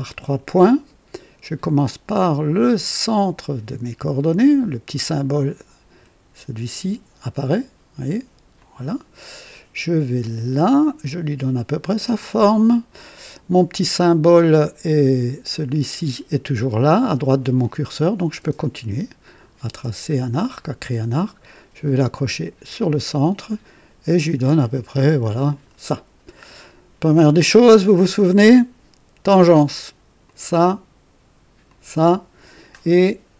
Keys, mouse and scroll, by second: 8.5 click, 10.5 click, 12.1 click, 19.2 click, 22.6 click, 25.4 click, 26.3 right click, 30.2 click, 31.6 click.